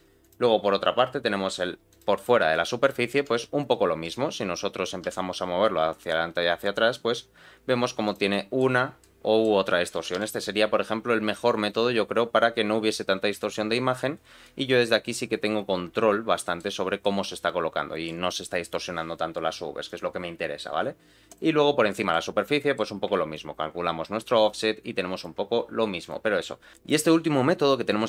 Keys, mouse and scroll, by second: 0.2-2.0 drag, 2.5 middle click, 3.1 g, 8.3 middle click, 9.0 middle click, 9.9 g, 13.7 middle click, 14.1 scroll up 2, 14.4-16.6 middle drag, 16.7 scroll down 2, 17.0-18.1 middle drag, 19.8-21.4 drag, 21.9 middle click, 22.6 middle click, 23.3-25.2 shift+drag, 26.0 click.